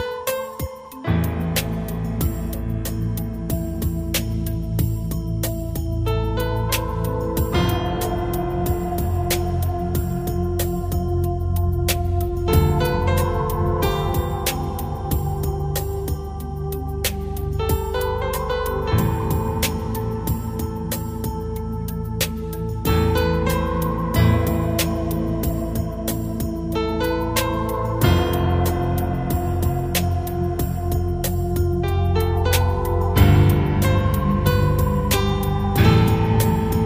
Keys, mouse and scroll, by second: 1.8 p, 2.7 right click, 4.2 click, 13.2 right click, 14.4 g, 16.1 click, 17.7 middle click, 26.3 click, 27.5 click.